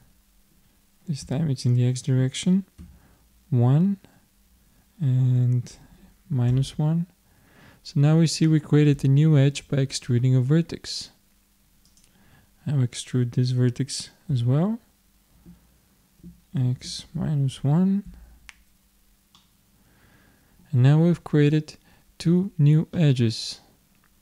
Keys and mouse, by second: 11.9-13.7 drag, 14.3 e, 19.4-21.2 middle drag, 23.0-24.2 middle drag.